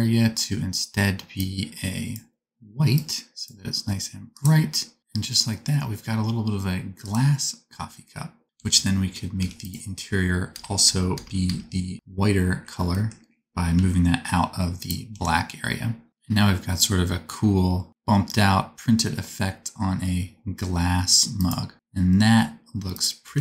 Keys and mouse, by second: 8.5 Tab, 9.3 3, 9.6 click, 10.5 ctrl+KP_Add, 13.7 g, 14.7 middle click, 14.7 g, 15.1 Tab, 16.1 KP_0, 16.1 r, 16.8-19.8 middle drag, 21.7 r, 22.2-23.4 drag, 23.2 r.